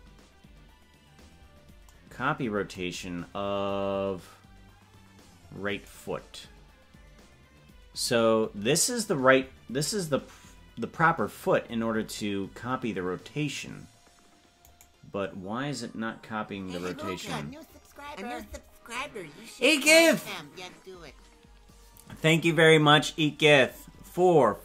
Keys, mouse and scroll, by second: 6.2 right click.